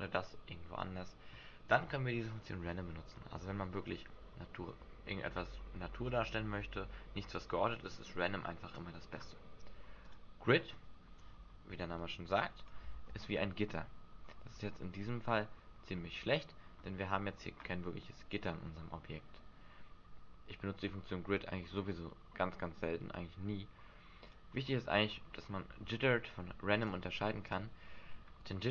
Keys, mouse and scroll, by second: 0.7 middle click, 10.0 click, 12.3 click, 12.9 alt+a, 17.3 Escape, 24.3 click, 26.8 click, 27.4 click.